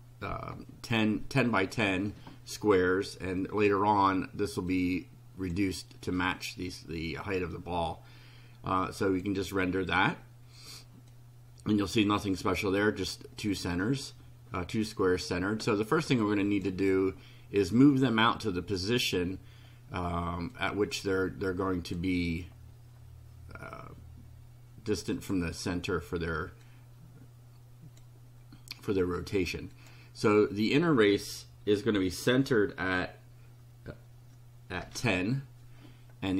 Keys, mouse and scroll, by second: 4.7 click, 9.0 click, 11.1-12.6 drag, 13.5 click, 16.5 click, 20.5-22.1 drag, 25.1 click, 26.7-28.2 drag, 29.7 click, 34.8 1.